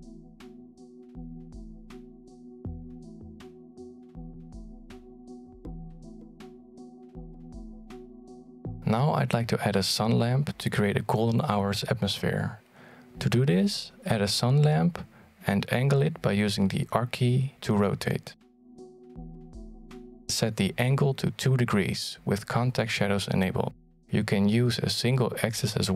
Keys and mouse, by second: 2.3-4.3 drag, 5.2-8.6 drag, 10.0 click, 11.5 click, 12.0 middle click, 12.4 alt+shift+z, 13.9 middle click, 15.2 shift+a, 17.2 middle click, 17.8 g, 18.5 middle click, 19.2 r, 21.7 click, 22.9 click, 23.9 click, 25.2-25.9 middle drag.